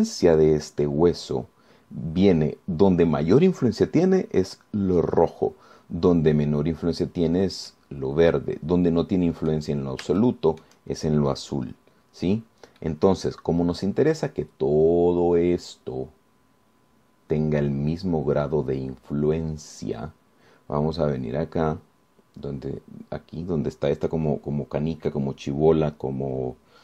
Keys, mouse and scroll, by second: 8.9-10.9 right drag, 11.1 scroll up 1, 11.4 shift+click, 11.9 shift+scroll up 1, 13.5-14.0 scroll down 1, 14.0-19.1 drag, 19.3 scroll up 1.